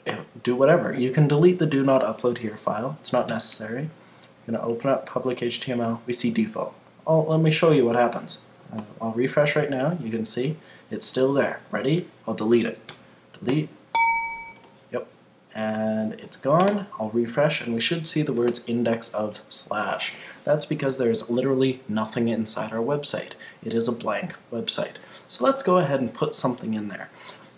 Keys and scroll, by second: 3.3 Return.